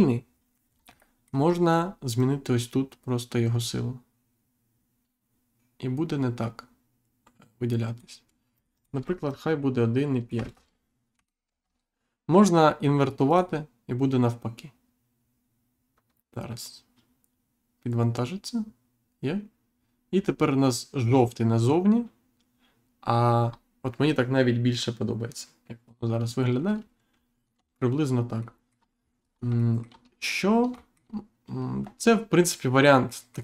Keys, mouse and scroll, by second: 0.7 scroll down 1, 1.1 middle click, 1.4 scroll up 1, 2.1 click, 8.5 click, 9.2 click, 10.3 BackSpace, 11.6 Return, 13.2 click, 23.4-24.1 scroll down 1, 26.8-27.1 scroll down 1, 27.1-27.5 scroll up 1, 28.4 shift+middle click, 28.9-29.5 scroll down 2, 29.5 shift+middle click, 30.1 scroll down 1, 30.7 shift+middle click, 33.0 middle click.